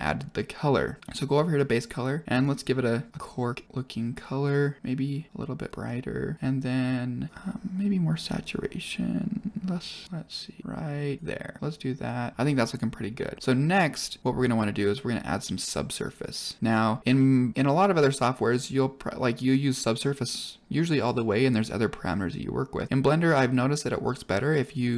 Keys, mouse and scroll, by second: 1.0 click, 1.5 click, 5.3 click, 13.1 scroll up 3, 13.4 middle click, 14.4-14.9 scroll up 1, 14.9 middle click, 16.1-21.0 drag, 22.7-24.9 drag.